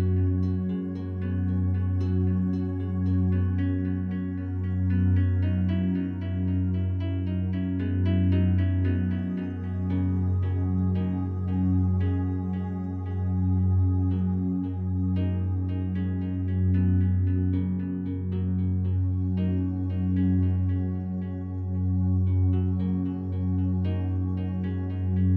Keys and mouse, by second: 0.7-1.1 alt+shift+drag, 1.3 alt+drag, 1.8 ctrl+alt+drag, 2.2-4.3 alt+drag, 5.7 alt+shift+click, 6.2-7.8 alt+drag, 8.3 ctrl+alt+drag, 8.9 alt+shift+drag, 10.0 3, 10.7 alt+shift+drag, 11.1 ctrl+alt+drag, 11.7 alt+shift+drag, 13.1 click, 13.7 click, 14.4-16.9 Tab, 15.0-18.4 alt+shift+drag, 19.1-21.0 drag, 20.4-25.3 ctrl+z, 22.5 f, 23.0 click, 23.7 click, 25.1 click.